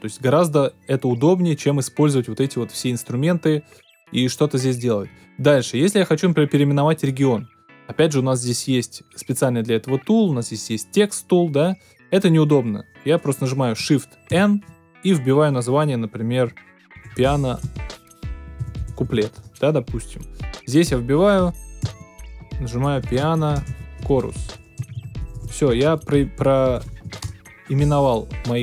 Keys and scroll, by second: 14.3 shift+n, 16.6-19.5 typing, 21.8-27.5 typing.